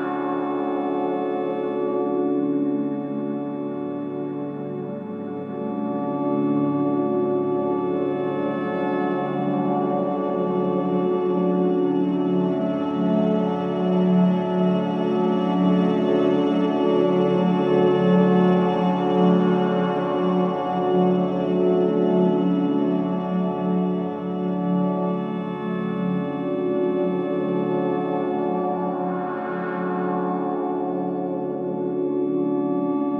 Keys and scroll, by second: 0.8 3, 1.8 \, 3.0 F1, 4.9 ], 9.0 ctrl+z, 11.5 ], 13.7 ctrl+z, 17.0 4, 21.1 ], 24.8 ], 25.4 ], 26.9 4, 31.0 1.